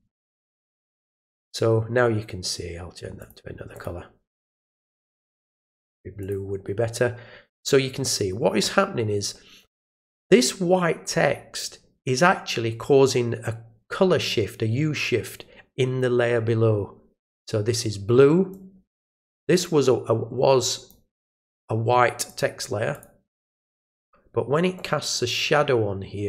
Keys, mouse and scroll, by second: 3.2 click, 3.7 click, 5.8 click, 6.2 click, 9.9 click, 18.5-18.9 drag, 19.5 click, 20.6 click, 21.4 click, 22.2 click, 22.9 click, 24.7-26.2 drag.